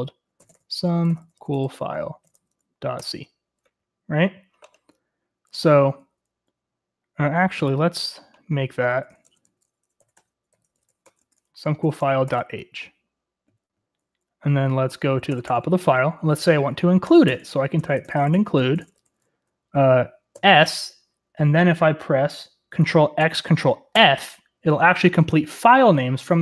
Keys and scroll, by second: 0.0-2.8 typing, 2.9 Return, 5.7 typing, 8.7-12.3 typing, 15.3-20.3 typing, 17.5 Return, 23.2 ctrl+x, 23.8-24.5 typing.